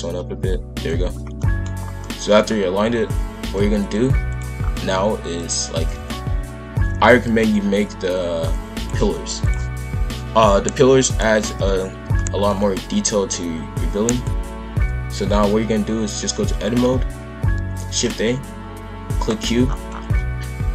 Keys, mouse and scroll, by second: 1.2 scroll up 1, 1.4 middle click, 1.8-2.6 scroll down 3, 2.0 middle click, 3.8-4.5 drag, 4.5 scroll down 1, 4.8-5.8 middle drag, 5.8 shift+f, 9.4 click, 11.2 KP_5, 11.5 KP_1, 12.1 shift+middle drag, 12.4-14.0 scroll up 3, 14.0 scroll up 2, 14.1-17.1 drag, 17.5 shift+a, 19.6-20.1 scroll down 6, 20.1 g.